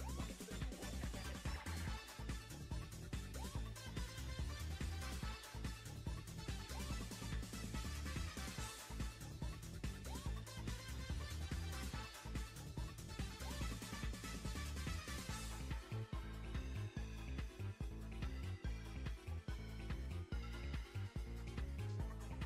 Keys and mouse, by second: 0.4 shift+middle drag, 0.8 shift+middle drag, 1.2 click, 1.4-5.1 typing, 2.5 click, 3.4 click, 3.8 click, 4.4-4.8 drag, 4.9 click, 5.5 drag, 6.0 click, 6.1 g, 6.6 click, 7.0 click, 7.1 g, 7.9 click, 8.7 space, 8.9 space, 9.4-9.8 drag, 9.8 space, 10.0 space, 10.7 Delete, 11.1 r, 11.7 r, 12.1 r, 12.9 click, 13.2-17.7 typing, 13.7 click, 14.5 click, 15.6 click, 16.3-16.7 drag, 16.8 click, 17.6 click, 18.5 click, 18.9 click, 19.2-22.0 typing, 20.3 click.